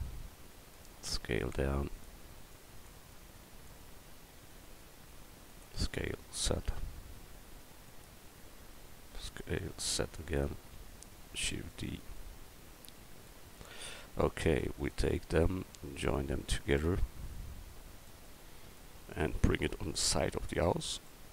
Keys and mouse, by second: 0.2 click, 1.1 s, 3.2 click, 4.5 s, 5.8 s, 9.2 s, 11.4 shift+d, 12.1-13.3 drag, 14.8-16.1 right drag, 17.4-19.1 drag, 20.0 click, 21.1-21.3 middle drag.